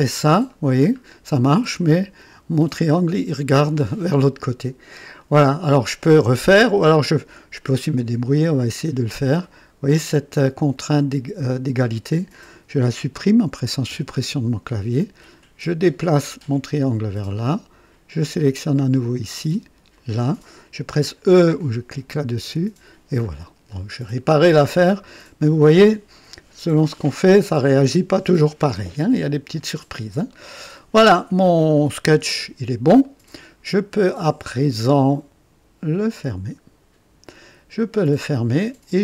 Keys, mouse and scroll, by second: 0.0 c, 0.9 scroll up 2, 1.5 middle click, 1.8 right click, 4.7 scroll up 1, 5.2 right click, 10.7 click, 13.8 Delete, 15.9-17.5 drag, 18.6 click, 19.9 click, 22.4 e, 23.3-23.7 scroll down 1, 23.4 typing, 24.8 right click, 30.2 right click, 33.0 right click, 36.2 click, 38.0-39.0 drag.